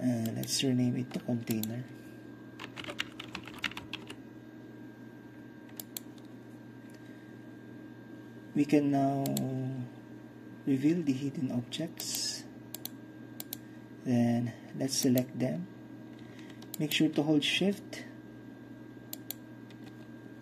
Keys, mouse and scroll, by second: 1.2 right click, 1.6 click, 2.7-4.0 typing, 5.9-7.9 drag, 9.3-17.2 drag, 17.2-20.2 shift+middle drag.